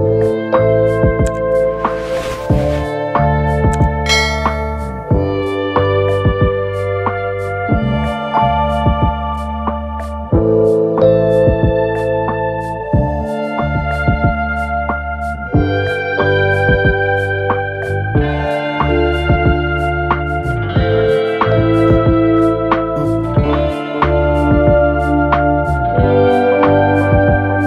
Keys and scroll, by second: 4.1 alt+shift+Return, 27.5 ctrl+shift+-.